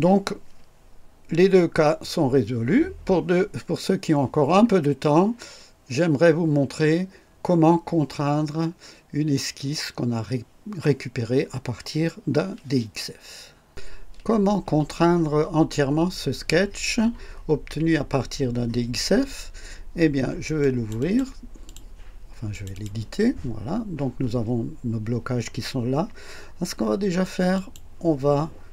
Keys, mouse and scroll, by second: 20.6 click, 21.7 click, 22.5 click, 27.6 click.